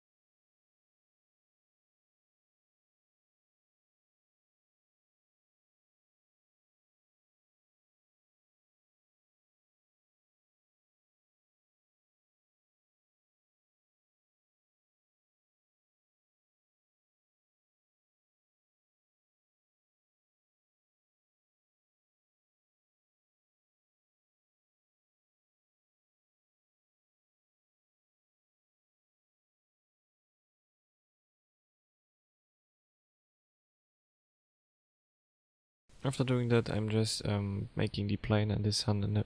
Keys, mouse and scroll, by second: 0.3 click, 2.1-2.6 scroll up 3, 2.9 shift+middle click, 3.6 s, 4.0 click, 4.5 click, 5.8 click, 8.5 click, 10.3 click, 10.8 click, 11.1 click, 11.3 click, 11.5 click, 11.6 click, 11.8 click, 12.0 click, 12.3-12.9 scroll down 4, 12.9 shift+s, 13.0 shift+middle click, 13.5-14.0 scroll down 2, 14.3 click, 23.1 middle click, 23.7-24.1 scroll down 3, 24.6 click, 25.1 middle click, 27.1 scroll down 2, 27.5 middle click, 31.0 click, 31.6 click, 31.9 click, 33.8 click, 33.9 KP_0, 34.4 click, 34.9 KP_0, 36.0 click, 36.5 click, 37.7 click, 38.5 click.